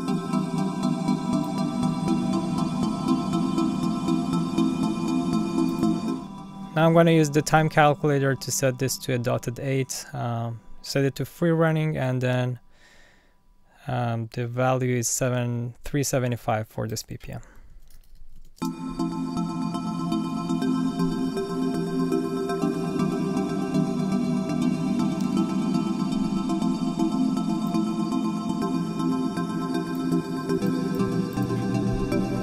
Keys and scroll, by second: 17.5-18.7 typing, 32.1 Up.